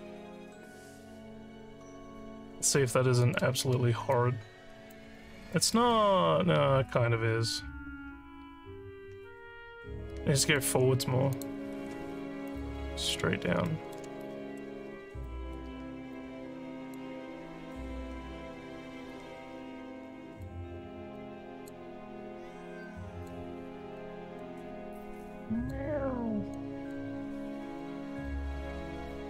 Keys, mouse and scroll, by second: 0.7 click, 2.6 click, 3.2 click, 4.1 alt+click, 5.1 scroll up 1, 5.5 alt+middle click, 5.9-10.6 alt+drag, 11.3 click, 12.4 click, 13.7 alt+middle click, 15.2 alt+middle click, 16.1 click, 17.8-19.1 drag, 20.0 click, 21.1 click, 22.9 click, 24.0 click, 25.2 click, 26.5 click, 27.8 click, 29.1 click.